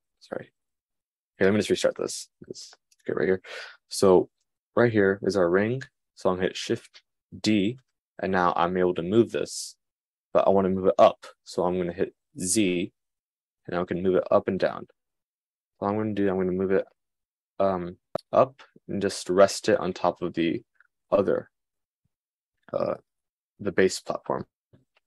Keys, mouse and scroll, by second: 0.5-19.1 super+drag, 0.6 super+z, 3.3 g, 8.5 shift+d, 19.1-20.7 middle drag.